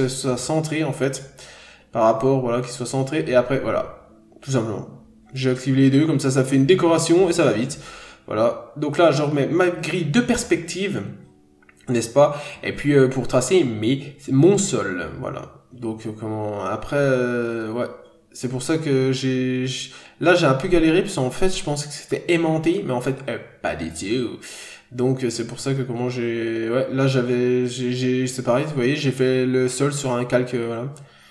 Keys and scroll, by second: 5.4 n, 5.6 scroll down 1, 13.6 ctrl+z, 14.7 ctrl+z, 15.7 ctrl+z, 17.7 ctrl+z, 18.9 ctrl+z, 19.5 ctrl+z, 23.9 ctrl+z.